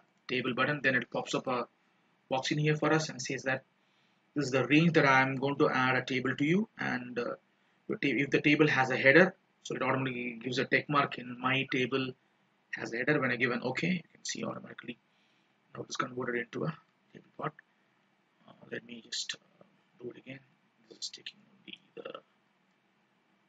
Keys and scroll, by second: 19.0 ctrl+z.